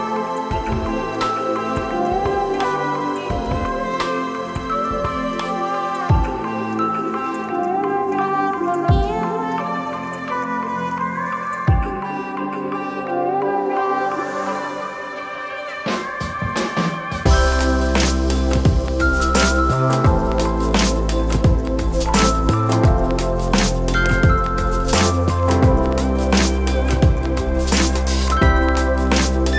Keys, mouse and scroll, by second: 1.0 shift+middle click, 2.1 ctrl+middle click, 3.2 middle click, 4.7 click, 5.8 shift+d, 7.9 e, 9.5 s, 11.6 KP_3, 13.1 e, 19.3 s, 22.1 e, 26.5 s.